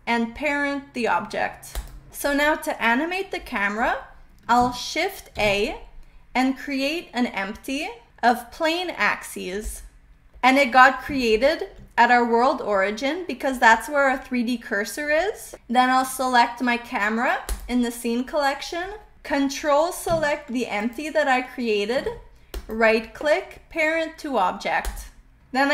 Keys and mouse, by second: 5.3 shift+a, 11.2 shift+middle click, 11.2 shift+click, 11.4 shift+middle click, 11.4 shift+drag, 17.4 click, 20.7 ctrl+click, 22.5-25.1 right drag.